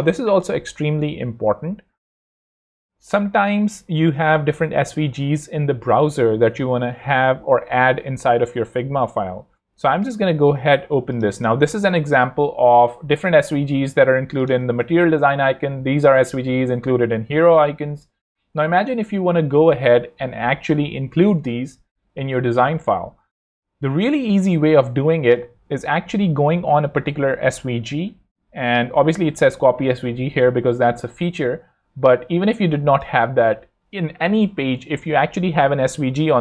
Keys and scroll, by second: 14.7 super+i, 27.1 shift+super+c.